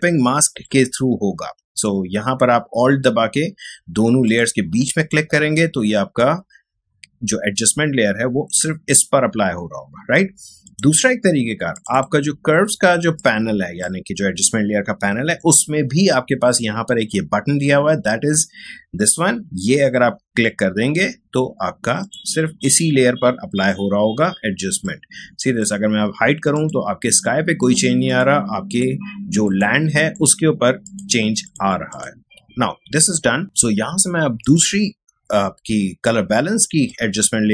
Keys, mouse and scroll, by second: 4.3 alt+click, 10.0-16.4 alt+drag, 22.0 click, 24.8-32.1 drag, 34.4 click, 36.9-37.5 drag.